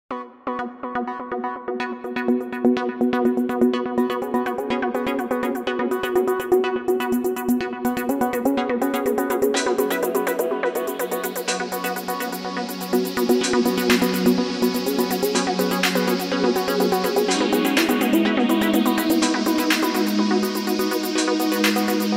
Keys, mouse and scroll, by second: 0.0-6.5 typing, 1.8 super+KP_3, 2.4 click, 2.7 shift+click, 3.1 ctrl+super+z, 6.2 super+KP_3, 7.0 Tab, 7.6 Tab, 8.5 click, 8.7 Tab, 8.8 ctrl+z, 8.9 g, 9.1 Tab, 10.1 Tab, 10.7 e, 11.2 g, 11.3 Tab, 12.1 Tab, 12.4 a, 12.8 e, 13.2 z, 13.7 Tab, 13.9 super+r, 14.0 super+z, 14.1 super+r, 14.3 super+z, 14.5 Tab, 14.7 super+r, 14.8 super+r, 14.9 Tab, 15.2 Tab, 16.1-20.3 typing, 17.9 Tab, 18.7 super+z, 19.0 super+z, 19.6 super+z, 20.0 super+z, 20.5 super+z, 21.2 Tab, 21.4 e, 21.9 super+z.